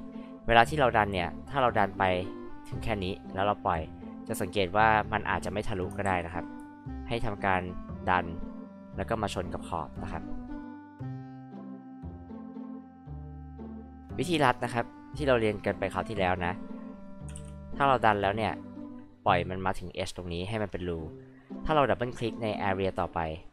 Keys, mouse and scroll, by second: 0.0-21.0 drag, 21.0-23.5 drag.